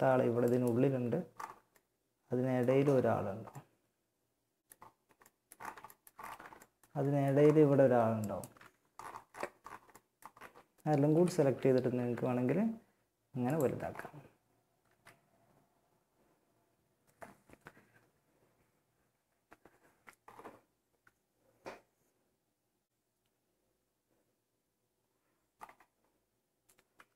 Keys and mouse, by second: 7.4 right click, 8.8 middle click, 10.3 KP_1, 10.6 z, 11.2 z, 11.8 s, 12.9 z, 14.0 z, 26.4 z, 26.6 Tab.